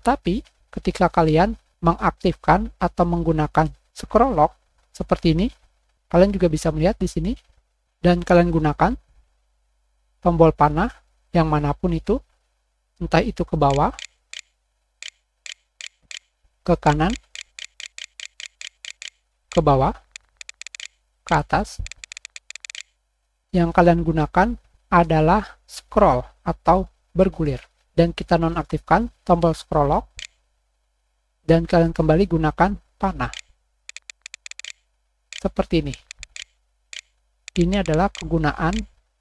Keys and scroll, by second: 5.5 Scroll_Lock, 6.3 Down, 9.0 BackSpace, 9.1 \, 9.2 Up, 9.2 Down, 13.6 Down, 14.0 Down, 14.3 Down, 15.0 Down, 15.5 Down, 16.0 Down, 16.8 Right, 17.1 Right, 17.3 Right, 17.6 Right, 17.8 Right, 18.0 Right, 18.2 Right, 18.4 Right, 18.6 Right, 19.2 Down, 20.7 Down, 20.8 Up, 28.2 Delete, 28.2 Print, 30.5 Print, 30.6 Delete, 30.7 Right, 33.2 Right, 35.3 Down, 36.8 Left, 37.4 Left, 38.1 Left, 38.7 Left.